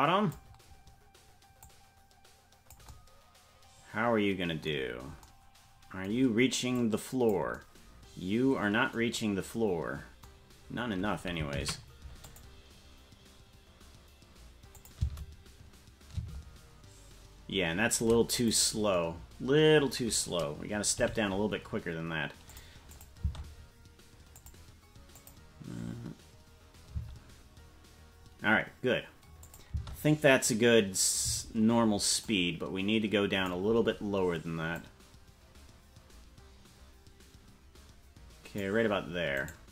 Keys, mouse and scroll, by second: 1.6-2.8 drag, 6.7 click, 14.2 ctrl+s, 14.7 click, 15.0 space, 16.6 space, 18.6-19.8 right drag, 20.9 g, 22.9 click, 23.2 space, 24.4 click, 25.1 click, 26.9 space, 29.4 click, 29.7 space, 31.9 space, 32.2-33.5 drag, 34.7-38.7 drag, 39.5 right click.